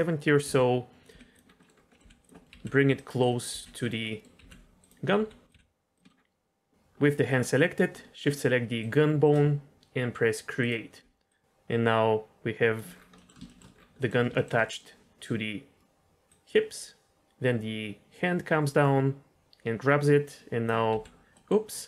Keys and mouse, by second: 0.4-5.5 typing, 1.6 middle drag, 1.9 middle click, 2.3 middle click, 3.2 middle click, 3.8 click, 4.0 middle click, 4.8 click, 5.4 click, 8.8 shift+click, 10.5 click, 11.3-12.7 drag, 13.1 middle click, 13.4 shift+middle drag, 14.0 middle click, 14.3 shift+middle click, 14.6 middle click, 16.3-20.6 drag, 20.9 g, 21.4 middle click.